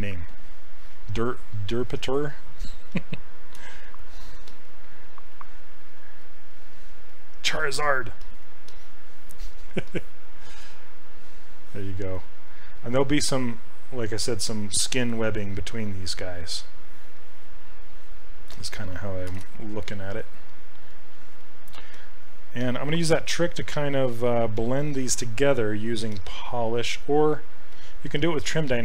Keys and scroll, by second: 3.6 q, 19.3 shift+f.